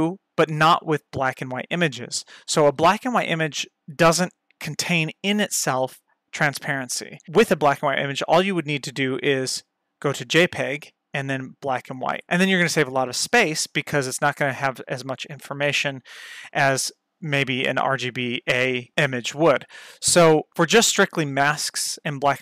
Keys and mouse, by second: 8.6-10.2 drag, 11.3 click.